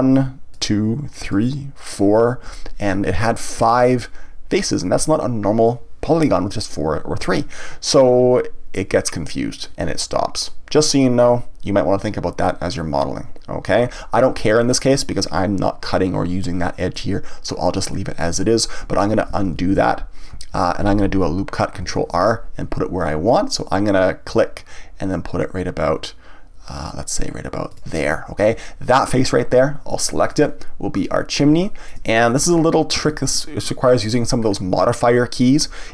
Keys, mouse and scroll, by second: 0.5 shift+click, 1.2 shift+click, 1.9 shift+click, 14.7-16.9 scroll down 1, 16.9-18.9 middle drag, 18.9 ctrl+z, 27.8 click, 30.3 click, 30.9 click, 31.6-34.4 shift+middle drag, 34.4-35.1 scroll up 1, 35.1-35.9 middle drag.